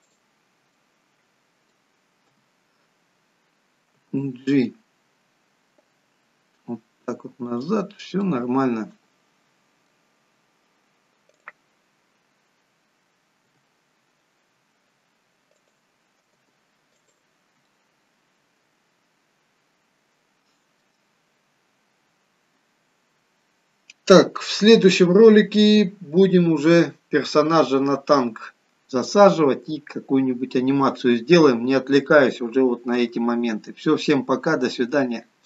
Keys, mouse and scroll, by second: 0.1 click, 0.8 middle click, 2.3 KP_3, 4.0 g, 8.3 middle click, 11.4 click, 13.5 g, 17.8 middle click, 17.8 g, 21.1-22.0 scroll down 4.